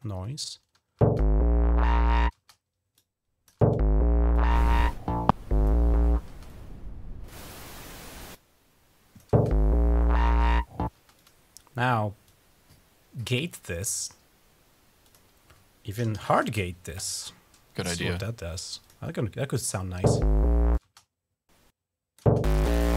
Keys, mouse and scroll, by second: 0.8 space, 2.1 space, 2.7-3.9 drag, 3.4 space, 4.1-5.7 drag, 5.9 typing, 6.3-7.7 drag, 8.1 click, 10.9 click, 12.0-13.2 drag, 13.7 right click, 14.2 typing, 14.8 click, 15.5-16.5 typing, 17.8 click, 18.0-18.7 typing, 18.6 click, 19.8-20.8 typing, 20.5-22.3 drag, 22.0 typing.